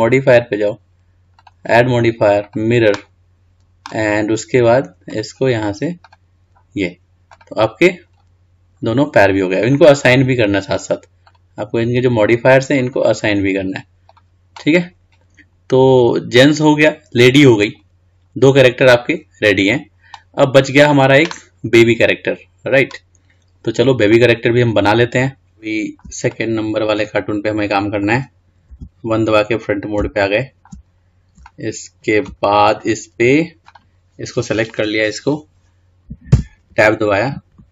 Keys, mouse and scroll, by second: 0.4 click, 1.7-4.6 drag, 5.4 click, 7.5 click, 8.3-8.8 scroll down 4, 8.8-9.8 scroll up 2, 9.8-12.0 drag, 13.2-14.7 drag, 15.3-18.4 scroll down 2, 18.4-20.3 scroll up 2, 20.3-21.4 scroll up 1, 21.7 scroll up 2, 22.1-23.3 scroll down 3, 23.3-24.3 scroll down 1, 24.3-27.4 middle drag, 27.4-27.8 scroll up 1, 27.8 middle click, 28.8 KP_1, 29.7-30.3 scroll up 1, 30.3-31.1 shift+middle drag, 31.1-31.6 scroll up 3, 31.6-32.6 shift+middle drag, 32.6 scroll down 2, 33.0-33.8 scroll up 2, 33.8 click, 36.4 Tab.